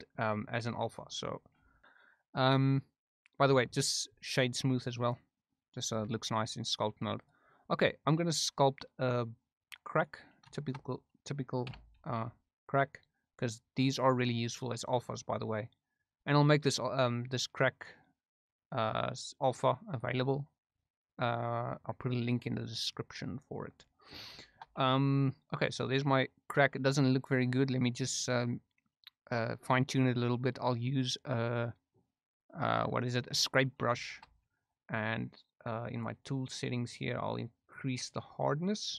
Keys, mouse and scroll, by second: 1.5 Tab, 1.8-5.2 right drag, 5.9 Tab, 7.9 middle click, 9.9 click, 10.5 shift+middle click, 11.6 3, 12.0 f, 13.4-23.3 drag, 23.8 middle click, 24.4 shift+middle click, 34.0 shift+middle click, 38.1 click.